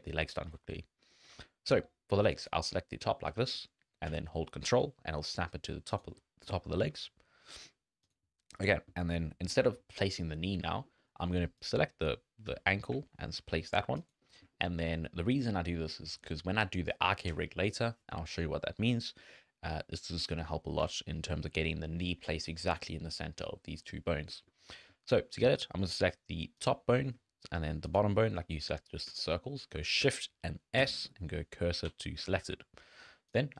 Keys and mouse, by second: 0.3 shift+click, 1.1 shift+click, 3.3 g, 6.5 shift+middle click, 7.5 shift+click, 8.0 click, 8.7 shift+click, 10.3 shift+click, 10.9 shift+click, 11.6 click, 12.5 g, 14.5 shift+click, 14.8 click, 19.2 click, 24.3 shift+click, 26.6 click, 27.8 shift+click, 29.2 shift+right click, 30.8 shift+s, 32.3 shift+right click, 33.3 click.